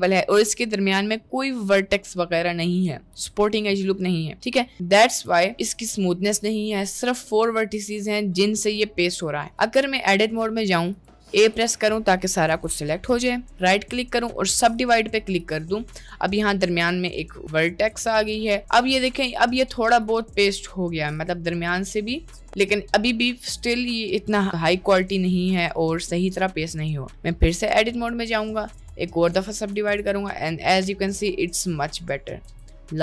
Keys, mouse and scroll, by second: 4.5 middle click, 5.2 Tab, 6.8 Tab, 8.8 Tab, 9.3 middle click, 9.6 Tab, 11.0 click, 11.3 a, 12.5 1, 13.7-15.9 drag, 18.3 Tab, 18.6-19.4 middle drag, 19.9 click, 22.1-23.9 middle drag, 24.3 middle click, 25.6 middle click, 26.1 middle click, 27.0 middle drag, 27.5 Tab, 28.3 click, 29.8 Tab, 30.0-32.4 middle drag.